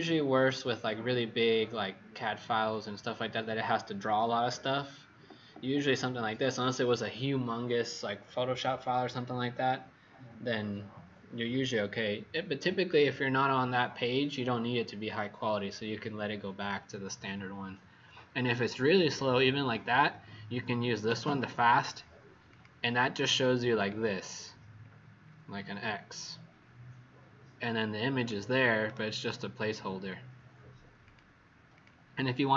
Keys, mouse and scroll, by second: 22.4 click, 23.9-24.9 alt+scroll down 4, 28.1 click, 28.8 right click, 31.0 click, 31.7 click.